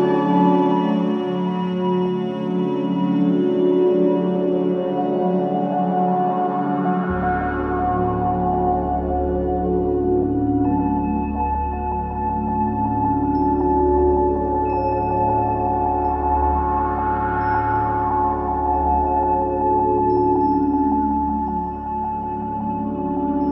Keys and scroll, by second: 4.2 5, 4.8 4, 8.1 F1, 9.0 1, 14.4 ], 19.5 ctrl+z.